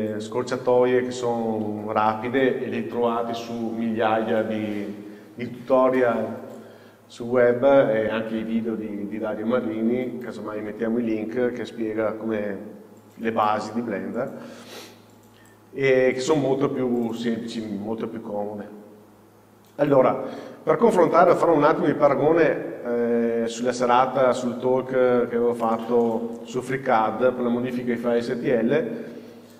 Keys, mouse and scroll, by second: 15.5 click.